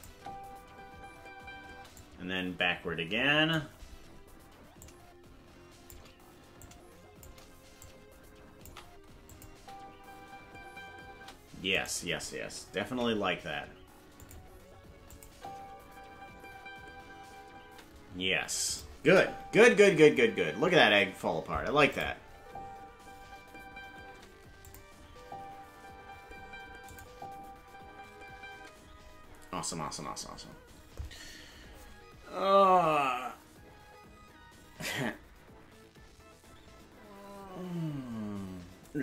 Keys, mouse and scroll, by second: 0.1 space, 2.0 click, 2.0 space, 4.8-5.9 shift+drag, 6.6 shift+click, 7.8 click, 9.3 click, 9.5 space, 11.7-12.8 right drag, 11.7 space, 12.8 shift+d, 15.1-18.0 drag, 15.3 space, 17.8 space, 18.7 click, 19.0 space, 21.9 click, 21.9 space, 22.3 space, 24.6 click, 24.6 space, 25.0 space, 26.9 click, 28.5 space.